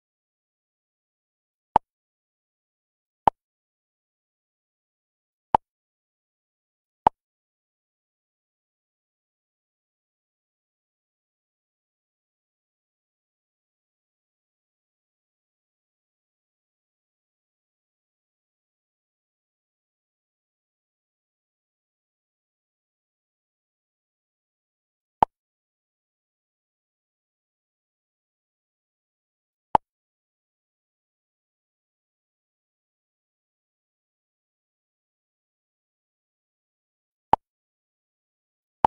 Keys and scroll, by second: 3.1 space, 6.7 ctrl+a, 10.1 space, 11.6 space, 12.1 space, 13.3 space, 15.5 space, 18.9 ctrl+v, 29.1 space.